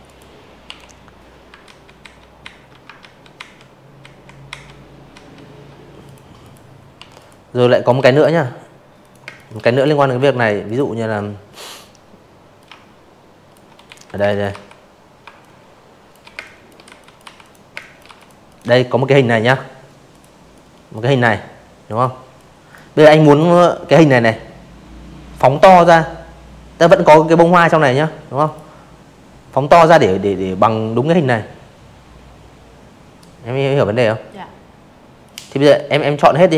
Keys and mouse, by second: 0.3 ctrl+z, 0.9 ctrl+z, 1.4 ctrl+z, 2.1 ctrl+z, 3.0 click, 3.4 click, 3.9 Delete, 4.1 click, 4.6 space, 4.7 click, 4.9 v, 5.1 click, 6.0 click, 6.2 space, 6.3 click, 6.6 v, 6.7 click, 7.6 click, 9.5 alt+shift+click, 10.8 z, 10.9 click, 11.2 space, 11.3 click, 11.5 v, 12.3 shift+click, 13.3-15.0 typing, 13.4 click, 13.9 click, 14.3 click, 14.7 click, 15.1 click, 15.4 click, 17.1 click, 17.5 click, 18.8 click, 19.3 click, 20.2 click, 20.9 click, 25.4 click, 32.2 click, 33.5 click, 33.7 click, 34.8 ctrl+g.